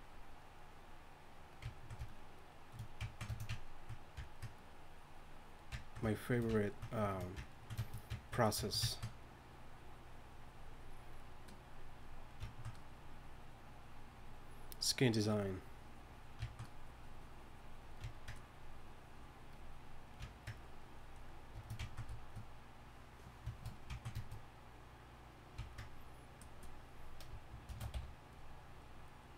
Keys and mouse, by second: 3.3-8.2 drag, 12.5-15.0 drag, 15.2-20.2 drag, 27.7 shift+c, 27.9 f.